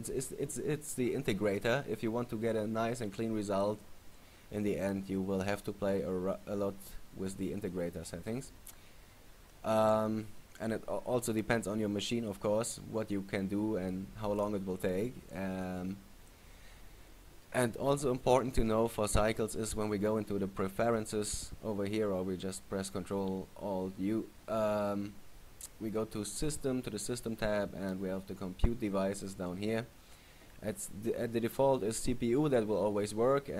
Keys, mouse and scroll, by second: 16.4-17.5 scroll up 3, 18.7 click.